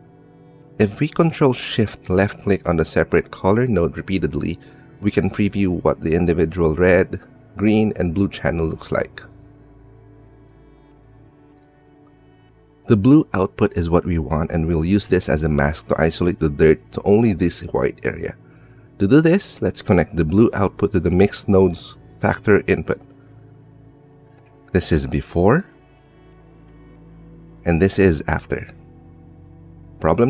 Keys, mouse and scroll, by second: 3.6 ctrl+shift+click, 7.8 ctrl+shift+click, 11.1 middle click, 12.1 middle click, 12.8 middle click, 13.6-14.6 drag, 15.2-16.6 drag, 17.5 click, 18.0 click, 18.1 g, 20.0-21.1 drag, 25.6 click, 29.6 click.